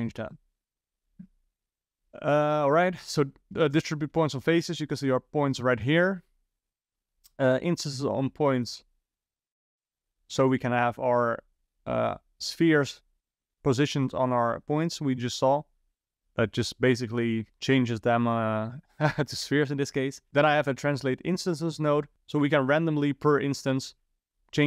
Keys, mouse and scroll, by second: 3.8 ctrl+shift+click, 10.5 ctrl+shift+click.